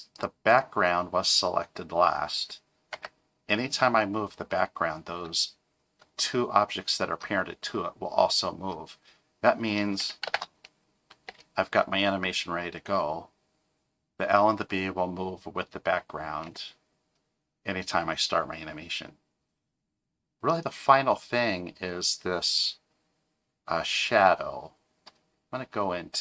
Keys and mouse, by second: 0.1 click, 0.5 click, 2.9 g, 10.3 shift+Left, 11.3 space, 16.4 space.